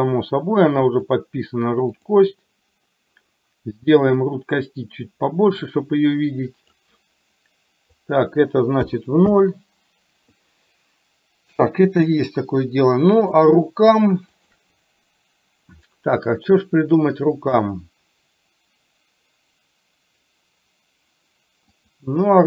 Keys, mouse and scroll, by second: 2.1 click, 4.3-6.8 drag, 7.9-9.4 drag, 11.7 middle click, 13.3 click, 21.7-22.4 drag.